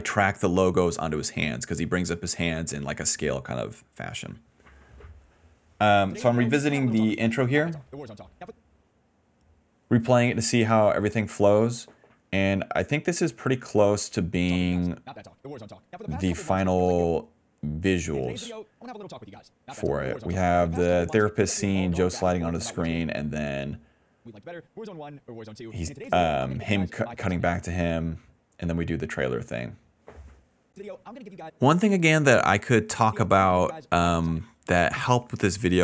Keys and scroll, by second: 1.0 shift+w, 4.8 w, 6.0 space, 8.4 space, 9.4 d, 14.3 space, 16.0 s, 16.9 space, 17.6 s, 18.0 space, 21.5 s, 22.7 d, 22.9 space, 24.1 space, 27.5 space, 30.6 space, 31.4 space, 33.0 space, 34.3-35.8 typing.